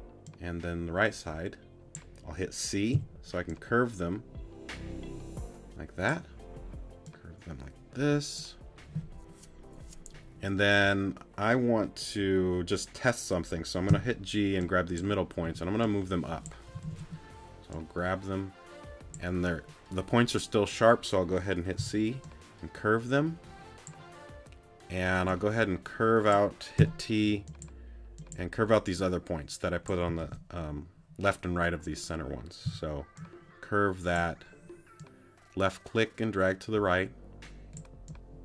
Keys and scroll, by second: 2.9 c, 13.9 g, 15.4 t, 21.8 c, 26.8 t, 32.6 c.